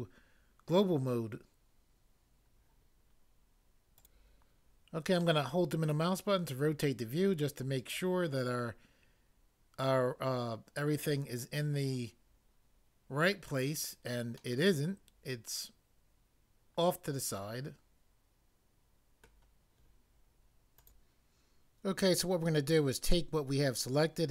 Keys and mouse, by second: 20.8 click.